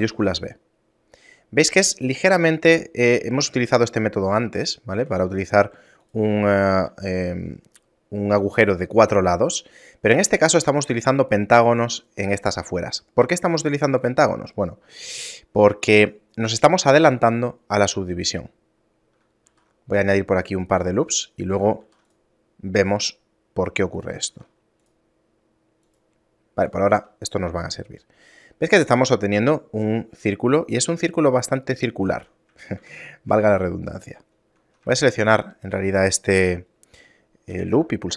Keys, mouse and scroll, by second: 2.8 shift+middle click, 4.2 middle click, 5.0 e, 6.5 shift+middle click, 9.8 shift+middle click, 19.4 ctrl+r, 20.8 right click, 21.8 ctrl+r, 24.2 ctrl+r, 26.9 ctrl+2, 29.2 shift+middle click, 32.2 Tab, 32.8 Tab, 33.1 shift+middle click, 33.7 scroll up 2, 35.0 alt+right click, 37.5 ctrl+b.